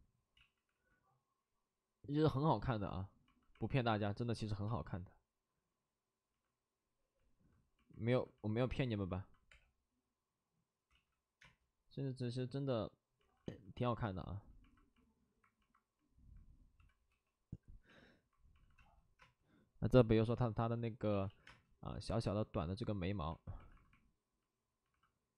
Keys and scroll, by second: 0.3 ctrl+z, 4.4 ctrl+z, 4.6 space, 8.7 space, 8.8 alt+s, 9.4 3, 10.9 ctrl+z, 11.4 space, 13.2 alt+s, 16.7 alt+s, 16.7 b, 17.0 p, 18.5 alt+s, 18.7 space, 19.1 space, 21.1 ctrl+z, 21.4 ctrl+z, 21.4 space, 23.6 alt+s, 24.8 alt+s.